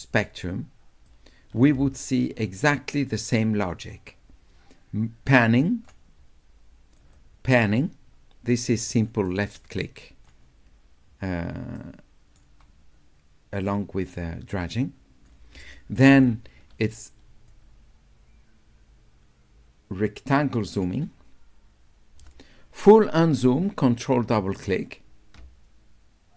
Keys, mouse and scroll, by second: 0.0-1.1 drag, 2.2-5.9 drag, 7.0-9.1 drag, 9.3 right click, 9.8 click, 11.8 right click, 13.5-15.3 drag, 17.5-20.8 drag, 24.5 ctrl+click, 24.8 ctrl+click.